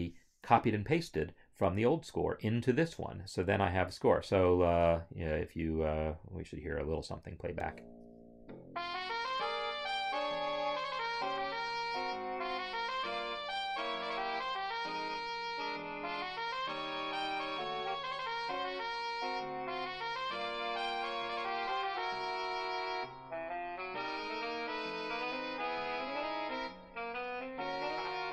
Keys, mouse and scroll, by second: 2.9 scroll, 5.4 click, 7.3 space.